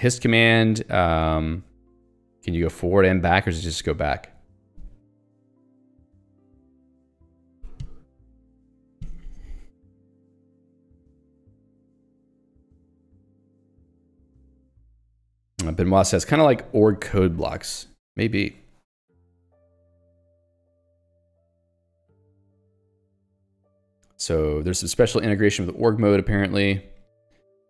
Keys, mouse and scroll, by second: 0.8 click, 1.2 Escape, 1.8 j, 8.8 ctrl+d, 9.7 j, 11.0 ctrl+d, 22.5 ctrl+u.